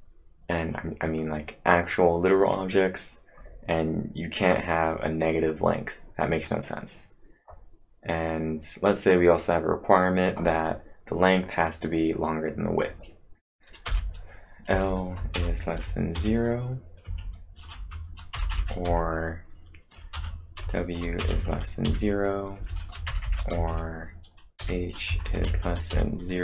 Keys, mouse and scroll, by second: 13.6-18.9 typing, 20.2-23.5 typing, 24.6-26.4 typing.